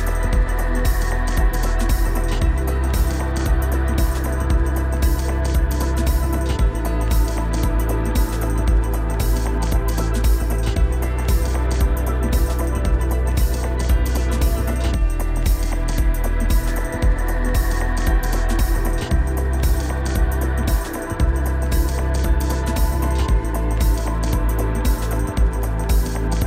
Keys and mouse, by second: 2.6 Tab, 6.6-7.2 right drag, 7.2 click, 7.9-8.3 drag, 9.5-10.6 drag, 11.1 click, 11.6-11.9 shift+drag, 12.0-12.6 drag, 12.8 Tab, 15.7-18.5 drag, 18.6 Tab, 19.3 /, 21.6 shift+click, 25.5-26.4 right drag.